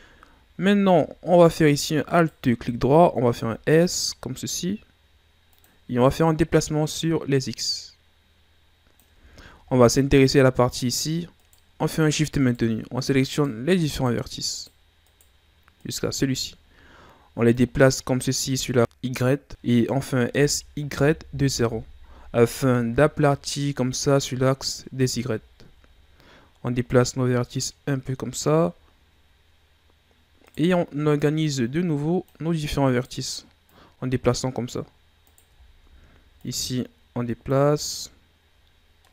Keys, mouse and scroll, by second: 2.1 alt+right click, 3.3 s, 6.3-9.3 drag, 9.3-9.7 shift+scroll down 6, 9.7-11.3 scroll up 1, 11.3 right click, 12.4 shift+right click, 13.3 shift+right click, 13.9 shift+right click, 14.5 shift+right click, 15.0 shift+right click, 15.8 shift+right click, 17.5-19.5 drag, 19.5-19.8 scroll down 2, 19.8-20.2 scroll up 1, 20.2 s, 22.5 scroll down 2, 22.7-25.4 middle drag, 25.4 shift+scroll down 2, 25.7-26.9 scroll up 3, 26.9-28.9 drag, 28.9-30.2 scroll up 2, 30.4 right click, 31.1-32.8 drag, 32.8 right click, 33.6-35.2 drag, 35.2 right click, 35.6-36.4 shift+scroll down 2, 36.4-38.7 drag, 38.7 scroll down 4, 39.0 middle click.